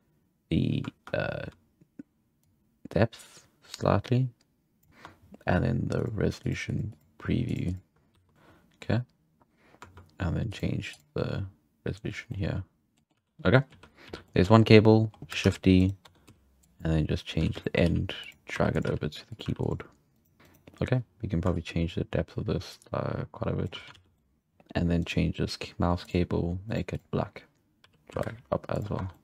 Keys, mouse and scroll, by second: 1.0-2.4 shift+scroll down 2, 2.4-4.9 shift+drag, 4.9 shift+middle click, 5.0 Tab, 6.0-8.1 drag, 8.1 w, 8.3-10.5 middle drag, 10.5-12.3 drag, 12.3-13.1 middle drag, 13.1 z, 13.4 scroll down 3, 13.5 middle drag, 13.7 z, 14.0 z, 14.2-14.6 middle drag, 15.0-15.4 scroll up 1, 15.4 shift+d, 16.0 Tab, 16.2 z, 16.6 click, 17.4-19.4 typing, 17.6 shift+middle drag, 20.1 right click, 20.4 scroll up 3, 20.5 right click, 21.5-24.0 shift+drag, 24.0 alt+a, 24.2 middle click, 24.4 right click, 25.0 right click, 26.0 click, 26.7 click, 26.9 click, 27.8 right click, 28.0 g, 29.0 Tab, 29.1 middle click.